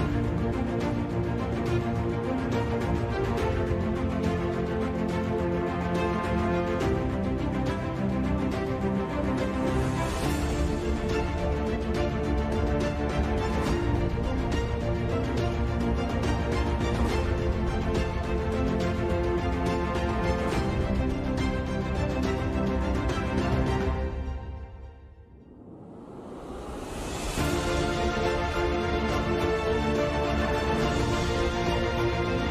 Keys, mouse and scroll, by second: 0.4 ctrl+z, 0.5 ctrl+z, 0.8 shift+a, 1.0 shift+a, 1.8 s, 3.4 s, 3.8 s, 6.4 ctrl+z, 7.0 z, 7.1 z, 7.3 g, 8.9 c, 10.5 g, 13.1 s, 14.6 f, 15.2 KP_3, 15.5 g, 17.1 s, 17.5 KP_7, 17.8 KP_8, 18.0 KP_5, 19.6 e, 22.0 l, 23.3 e, 25.7 l, 26.0 w, 27.0 a, 27.2 ctrl+s, 27.8 Tab, 28.4 Tab, 29.3 KP_5, 29.4 KP_3, 29.5 KP_Decimal, 30.4 g, 31.4 KP_5, 32.1 KP_5, 32.2 a, 32.3 ctrl+s.